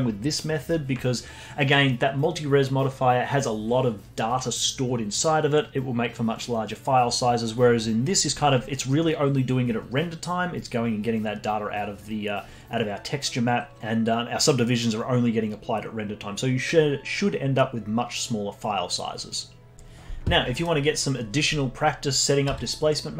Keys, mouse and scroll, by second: 20.5 middle click, 20.9 scroll up 1, 22.4 z.